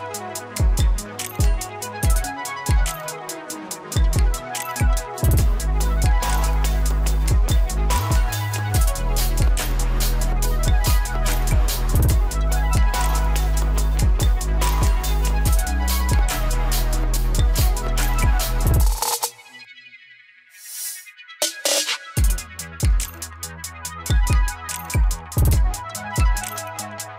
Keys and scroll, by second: 23.9 ctrl+z.